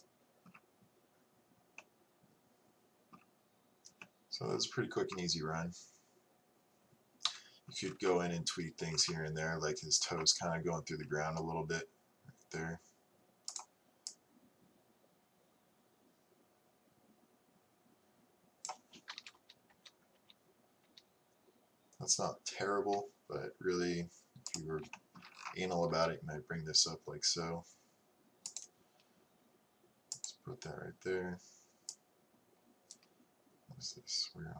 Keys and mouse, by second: 4.5-6.5 middle drag, 7.3 KP_3, 13.6-15.5 drag, 19.4 Right, 19.8 Right, 24.6 click, 24.8-28.5 right drag, 30.3-33.7 drag.